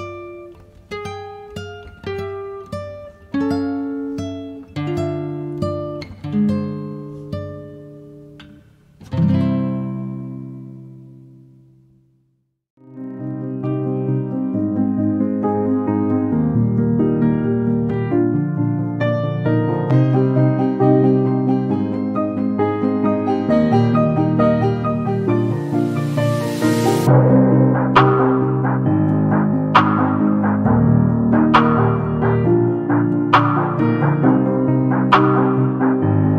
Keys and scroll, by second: 17.4 q, 17.7 space, 21.1 q, 29.8 9, 30.3 0, 30.6 Return, 34.2 m.